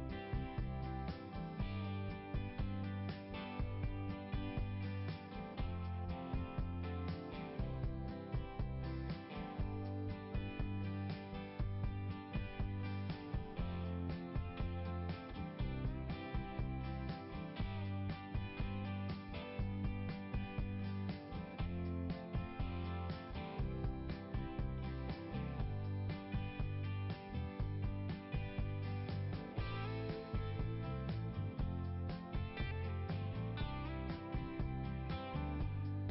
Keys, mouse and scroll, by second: 0.4-0.7 scroll down 1, 2.6 click, 3.9 click, 4.1 click, 4.2 click, 5.2 click, 5.9 click, 6.2 click, 6.4 click, 7.3 click, 8.2 click, 8.5 click, 10.0 click, 10.6 click, 10.9 click, 13.0 click, 13.3 click, 15.8 click, 16.8 click, 18.2 click, 20.2 click, 22.1 click, 23.6 click, 25.0 click, 25.8 click, 29.5 click, 31.3 click, 34.3 click.